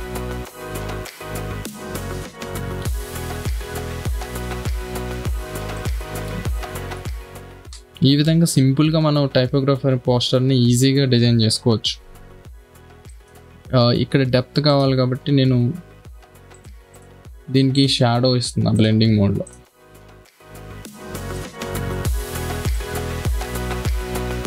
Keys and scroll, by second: 1.2 Down, 1.8 Up, 2.8 Down, 3.8 Left, 5.6 space, 12.4 b, 12.9 space, 13.6 v.